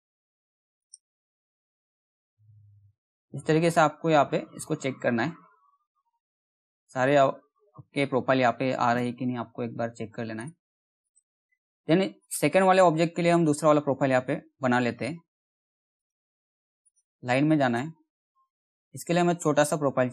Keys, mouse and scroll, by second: 1.2-2.9 scroll down 1, 4.4-5.5 scroll down 1, 5.5-6.1 scroll up 1, 6.1 middle click, 6.4-7.0 scroll up 1, 7.0-7.8 scroll down 1, 7.8-8.2 scroll down 1, 8.5 middle click, 8.9 scroll up 1, 9.9 right click, 10.6 click, 10.9-11.3 scroll down 1, 11.7 click, 12.4-13.8 typing, 13.8-15.1 scroll up 1, 15.5 click, 17.3 middle click, 17.6 scroll up 1, 17.8-18.3 scroll down 1, 18.3-18.9 scroll up 1.